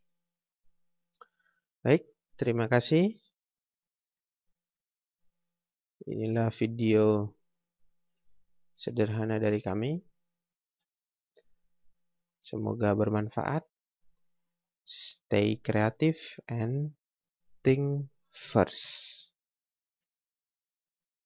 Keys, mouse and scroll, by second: 6.0 click, 10.8 Escape.